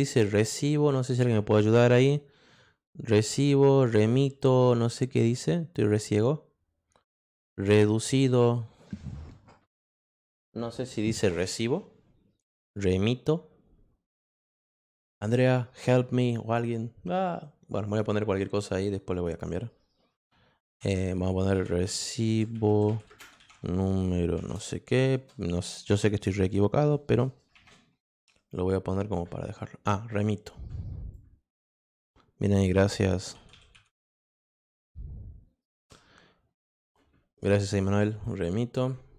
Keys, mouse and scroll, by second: 17.8 click, 19.1 click, 21.6-25.1 typing, 27.5 shift+\, 31.1-32.4 drag, 33.3 m, 33.7 t, 38.2 click.